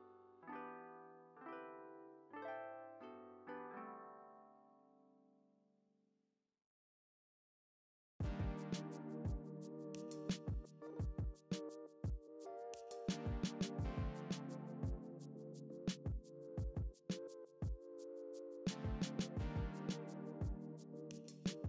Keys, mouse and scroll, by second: 0.2 click, 0.8 Tab, 1.2 `, 2.1 KP_0, 2.8 click, 3.8 alt+a, 8.6 scroll down 1, 8.8 click, 9.0 s, 9.4 alt+a, 10.4 click, 10.5 Tab, 12.0 click, 12.4-12.7 scroll up 1, 12.7 ctrl+r, 13.0 click, 13.4 2, 13.5 ctrl+x, 13.6 Tab, 14.0 alt+a, 14.1-16.1 scroll down 1, 16.4 click.